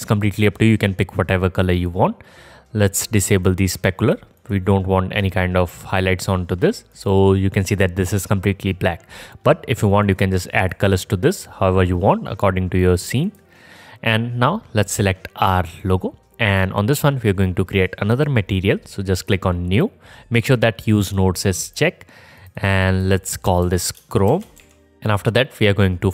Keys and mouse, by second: 1.7 click, 1.7 middle click, 1.7 right click, 3.6 click, 3.6 middle click, 3.6 right click, 7.0 click, 7.0 middle click, 7.0 right click, 11.0-13.3 drag, 13.2 middle click, 13.2 right click, 15.8 click, 15.8 middle click, 15.8 right click, 18.2-21.1 drag, 18.2-21.1 middle drag, 18.2-21.1 right drag, 21.5 click, 21.5 middle click, 21.5 right click, 22.3-24.9 drag, 22.3-24.9 middle drag, 22.3-24.9 right drag.